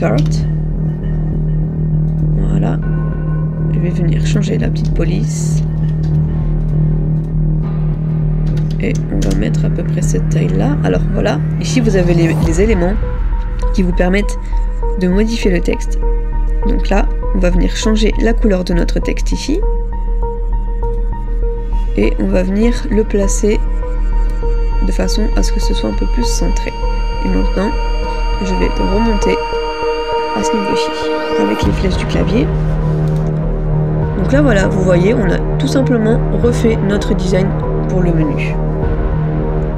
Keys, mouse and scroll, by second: 0.0-0.5 typing, 4.1 typing, 5.3-5.7 typing, 28.8 shift+Up, 29.1 shift+Up, 29.6 shift+Up.